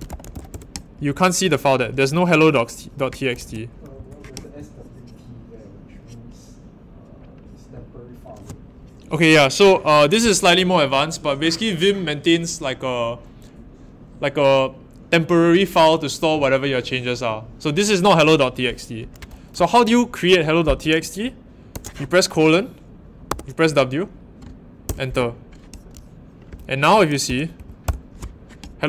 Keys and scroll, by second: 0.0-0.8 typing, 3.4-3.9 typing, 21.7 shift+;, 23.3 w, 24.8 Return, 27.2 ctrl+l, 27.5 shift+;, 27.8 Return.